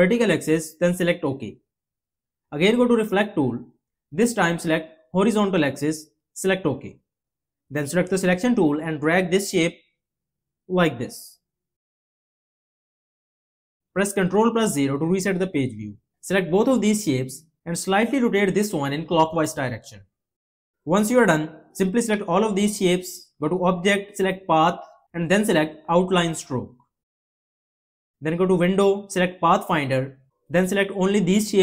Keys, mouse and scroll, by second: 14.2 ctrl+0.